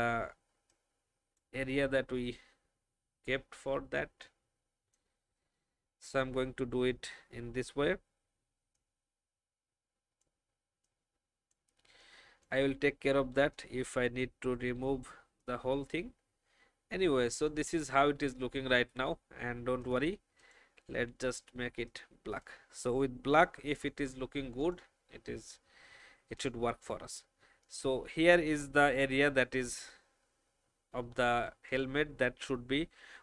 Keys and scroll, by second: 18.5 alt+v, 19.0 alt+v.